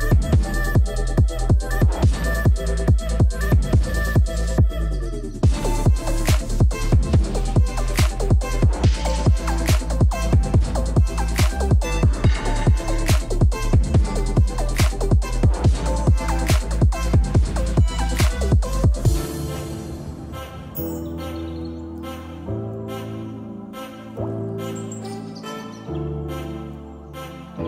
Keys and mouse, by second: 0.5 z, 1.1 z, 1.9 middle click, 2.5 middle click, 3.3 click, 4.0 shift+click, 4.4 shift+click, 5.0 shift+click, 5.5 shift+click, 6.0 shift+click, 6.9 shift+click, 7.3 middle click, 9.7 alt+shift+click, 10.6 alt+shift+click, 11.2 middle click, 11.9 click, 13.2 shift+middle click, 13.8 middle click, 15.5 Tab, 15.7 KP_Divide, 17.0 shift+middle click, 17.6 ctrl+s, 17.9 shift+middle drag, 19.1 click, 24.1 ctrl+s.